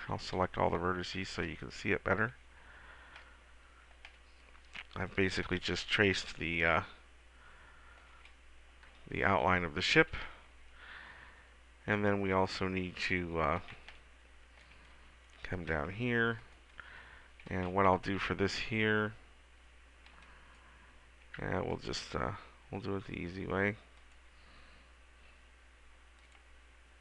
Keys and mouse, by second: 0.2 a, 0.6 a, 9.3 KP_1, 14.1 middle click, 15.2 middle click, 17.9 a, 20.2 b, 24.1-25.7 drag, 26.3-27.0 drag.